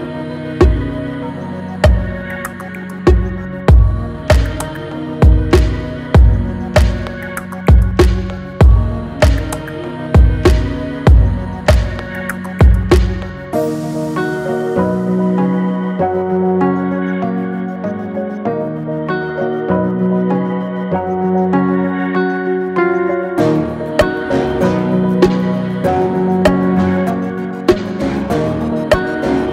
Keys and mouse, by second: 8.8-12.8 drag, 13.6-16.5 drag, 18.5-20.1 drag, 21.2-22.8 drag, 23.8 click, 26.1-28.6 shift+drag, 28.6 shift+middle click.